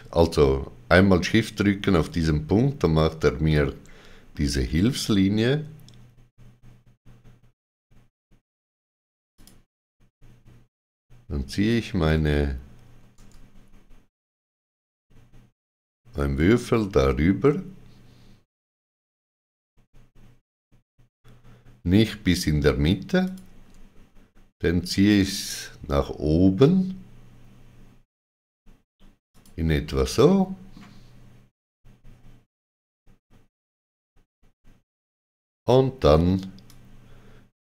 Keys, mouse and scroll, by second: 3.4 middle click, 9.3 click, 23.2 middle click, 23.2 ctrl+click, 29.2 ctrl+click, 30.1 middle click, 36.6 click.